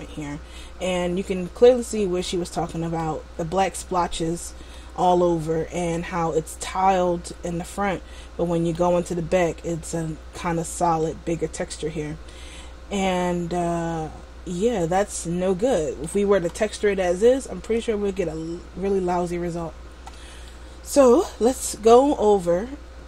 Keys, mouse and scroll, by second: 1.8 middle click, 5.2 middle click, 6.2-7.0 scroll up 1, 7.0-7.4 scroll up 1, 7.4-7.8 scroll down 1, 7.8 middle click, 11.3 middle click, 16.9-20.1 scroll down 1, 20.6 middle click.